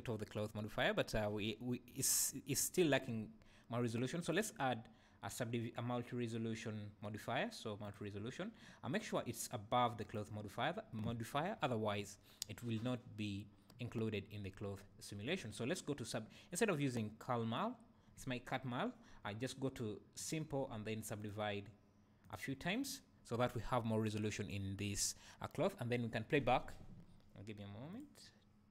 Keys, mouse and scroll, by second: 2.6 Escape, 4.2-10.3 drag, 11.5-15.5 scroll down 1, 20.2 click, 21.2-28.7 drag.